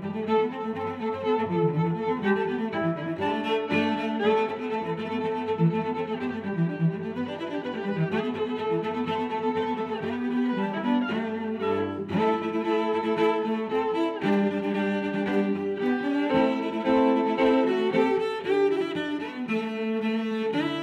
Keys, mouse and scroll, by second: 5.1 middle click, 6.4 x, 7.1 click, 7.4 middle click, 8.6 click, 8.9 click, 9.3 click, 9.8 click, 10.2 click, 11.1 middle click, 12.0 g, 12.4 z, 13.1 click, 13.6 g, 13.8 y, 14.9 click, 15.1 middle click, 16.2 middle click, 19.3 click, 19.7 shift+super+s.